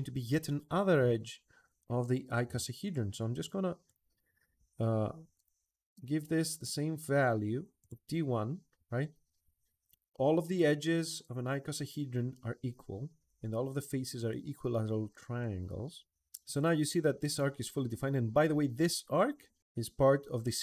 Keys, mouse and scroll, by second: 2.6 click, 3.6 click, 5.1 1, 7.6 click, 8.6 Escape, 9.2 Escape.